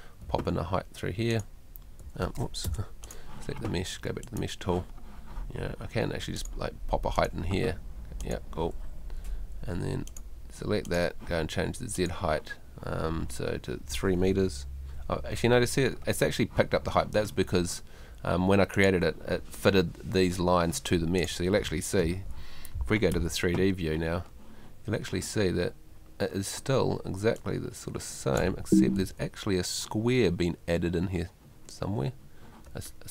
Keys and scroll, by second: 0.3 Home, 2.7 BackSpace, 9.0 Home, 22.1 Escape, 28.6 Escape.